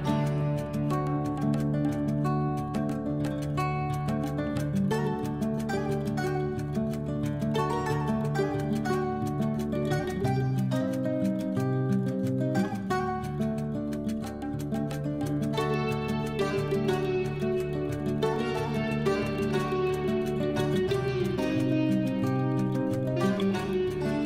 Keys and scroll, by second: 3.1 Left, 13.0 ctrl+g, 20.8 e.